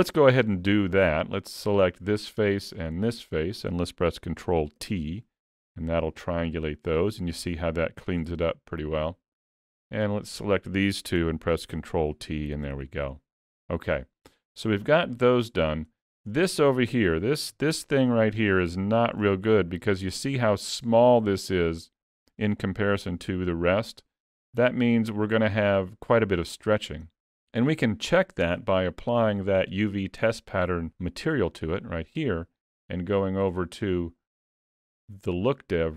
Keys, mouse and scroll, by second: 0.4 3, 1.7 click, 2.8 shift+click, 3.3 middle click, 4.8 ctrl+t, 6.0 middle click, 8.5-9.0 scroll up 2, 9.5 click, 10.2 shift+click, 11.7 ctrl+t, 12.8 alt+a, 13.2-13.7 scroll down 1, 13.7 middle click, 15.2 shift+middle click, 15.8-16.1 scroll up 3, 16.1 shift+middle click, 17.5 l, 18.5 scroll up 1, 18.8 shift+middle click, 19.3-19.7 scroll up 1, 21.6 scroll up 2, 28.7 click, 33.2 middle click, 35.8 click.